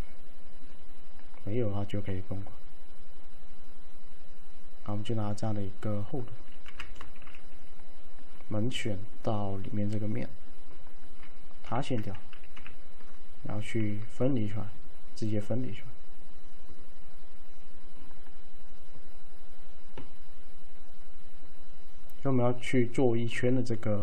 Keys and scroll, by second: 6.7 f, 7.1 F3, 11.7 F5, 12.6 4, 13.9 alt+d.